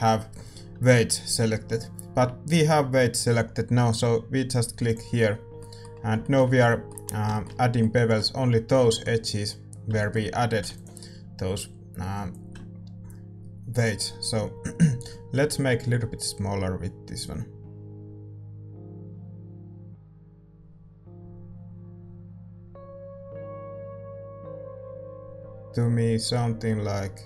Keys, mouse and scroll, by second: 4.8-6.6 drag, 5.5-12.3 middle drag, 12.3 ctrl+s, 12.3-27.2 drag.